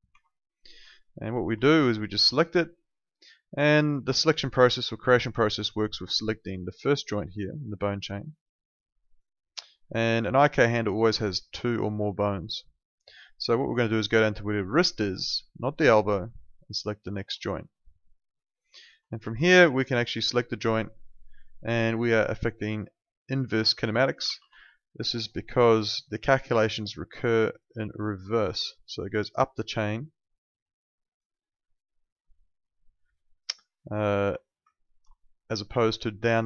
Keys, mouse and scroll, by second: 0.1 Escape, 2.3 click, 9.0 click, 16.2 click, 17.5 alt+click, 17.9 alt+middle click, 18.4 alt+right click, 18.7 alt+click, 19.2 w, 19.7 alt+click, 24.2 ctrl+z, 24.6 alt+middle click, 24.8 alt+right click, 25.6 ctrl+2, 34.2 Escape, 35.0 ctrl+2.